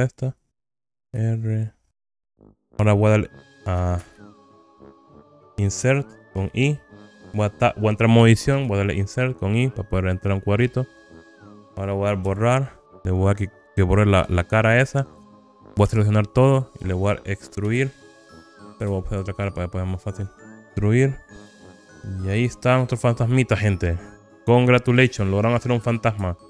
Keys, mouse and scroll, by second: 0.2 click, 0.8 KP_3, 1.2 r, 2.2 click, 2.4 KP_1, 4.0 alt+z, 5.2 alt+z, 6.4 i, 7.1 Tab, 8.7 i, 11.2 click, 12.4 Delete, 16.0 a, 17.8 e, 19.0 Escape, 19.4-20.4 middle drag, 20.6 alt+z, 20.6 scroll down 2, 20.8 e, 21.5 click, 21.7 KP_1, 22.3-24.5 scroll down 8, 24.8-25.3 shift+scroll up 2, 25.6 scroll up 1.